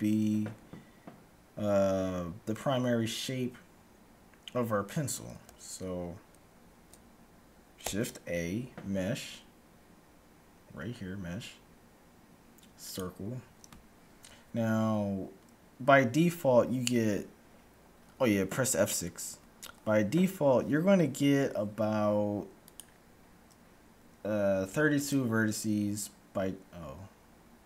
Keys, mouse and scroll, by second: 8.0 shift+a, 19.3 F6.